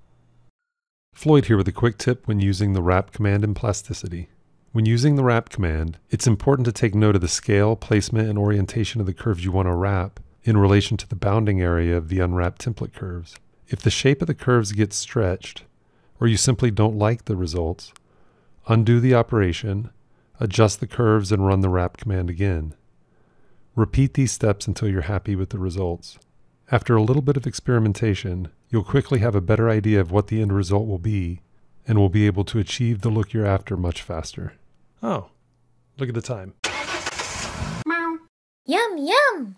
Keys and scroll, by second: 14.7 f, 18.2 ctrl+z.